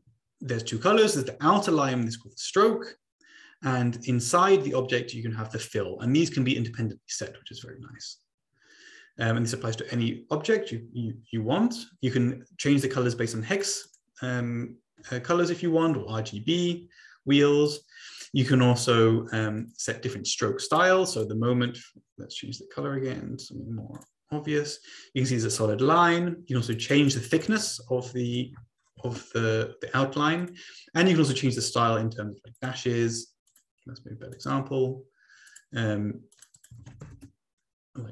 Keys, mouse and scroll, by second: 13.6 click, 17.6 click, 19.6 click, 20.6 click, 21.1 click, 23.9 shift+click, 26.7 click, 28.1 ctrl+click, 28.5 click, 28.5 ctrl+a, 28.8 typing, 29.1 Return, 30.4 click, 32.5 click, 33.5 click, 34.3 click, 35.5 click, 36.3 click, 36.5 click, 36.7 ctrl+a, 37.0 ctrl+a, 37.1 Return.